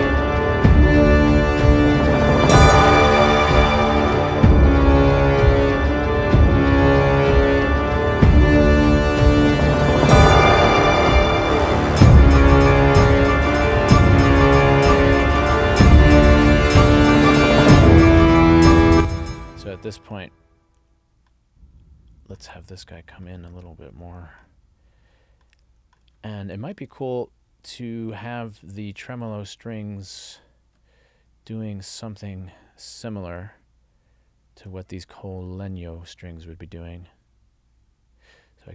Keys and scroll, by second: 18.9 space.